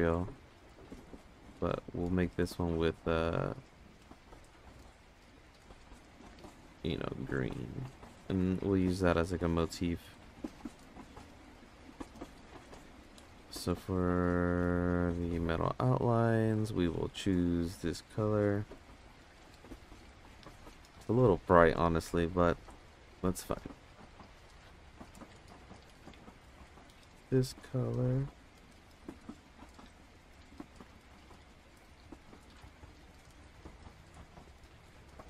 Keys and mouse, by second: 4.4 click, 6.6 click, 7.0 click, 9.6 click, 10.1 click, 10.6 drag, 11.2 click, 12.7 click, 14.2 click, 14.9 click, 15.9 click, 23.2 click, 25.0 click, 25.8 ctrl+z.